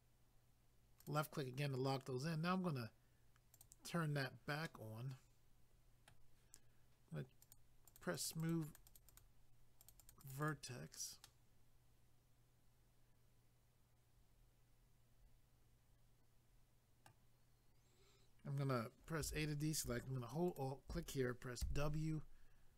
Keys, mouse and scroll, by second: 1.0 click, 3.5 click, 3.6 click, 4.7 middle click, 7.4 click, 7.5 click, 7.9 click, 8.0 double click, 8.2 click, 8.3 click, 8.4 click, 8.5 double click, 8.7 click, 8.8 click, 8.9 click, 9.0 double click, 9.1 click, 9.2 click, 9.8 click, 9.9 click, 10.0 click, 10.1 click, 10.2 click, 10.3 double click, 10.4 click, 10.5 click, 11.3 middle click, 19.3 a, 20.5 alt+click, 20.6 alt+click, 21.6 w.